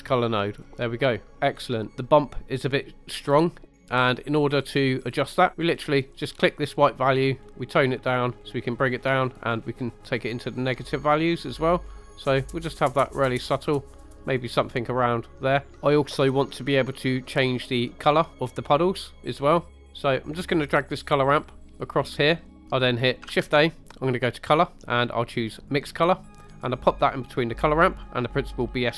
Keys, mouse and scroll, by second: 0.8-1.4 middle drag, 1.6 scroll down 2, 3.6 scroll up 1, 3.7 middle click, 6.2 click, 18.9 middle click, 19.7 middle click, 20.6-22.5 drag, 22.5 middle click, 23.3 shift+a, 27.9 click.